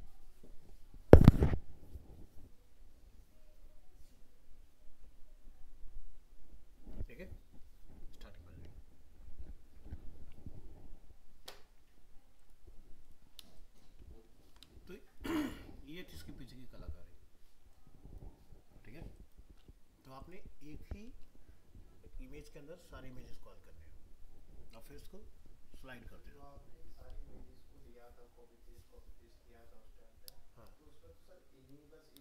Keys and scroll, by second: 14.2 ctrl+-.